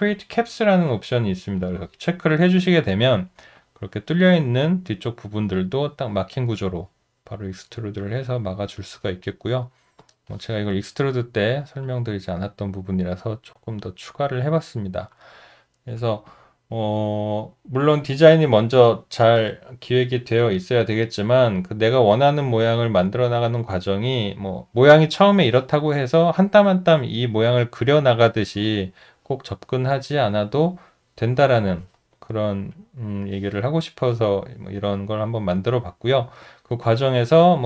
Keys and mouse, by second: 3.6 alt+click, 11.2 alt+middle click, 11.9 alt+click, 16.3 alt+click, 36.1 alt+middle click, 36.7 alt+right click, 37.1 alt+middle click.